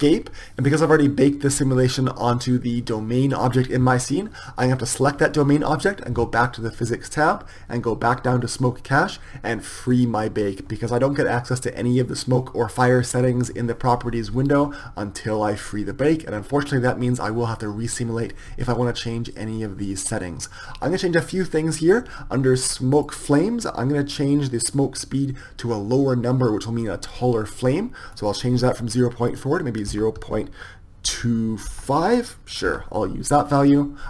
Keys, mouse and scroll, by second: 0.0 Escape, 7.1-17.9 drag, 22.8-34.0 drag.